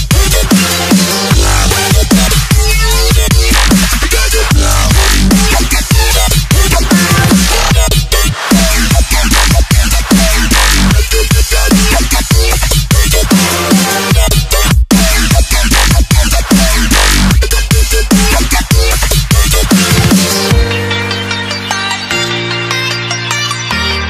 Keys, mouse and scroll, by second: 0.5 alt+click, 2.9-3.5 alt+scroll up 1, 3.5 click, 8.2 Delete, 8.8 click, 12.6-14.2 alt+scroll up 1, 14.2 alt+click, 19.5-19.9 scroll up 1, 20.3 ctrl+alt+s, 21.9 s, 23.2 click.